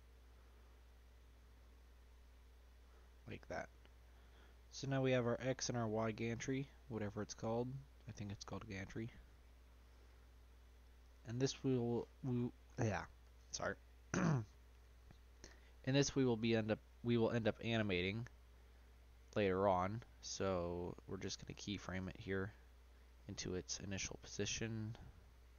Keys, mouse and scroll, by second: 3.3 click, 3.7-4.2 scroll down 3, 4.2 middle click, 4.5-4.9 scroll up 1, 4.9 middle click, 5.2 scroll down 2, 5.4 shift+middle click, 5.8 shift+scroll up 1, 5.9-7.6 middle drag, 7.6-8.4 scroll up 3, 8.4 shift+middle click, 9.3 click, 10.0 click, 10.8 click, 16.4 click, 18.0 scroll down 1, 18.3-19.9 middle drag, 19.9-20.4 scroll up 1, 20.9 click, 22.0 Tab, 22.9 shift+click, 24.2 click, 24.8 click.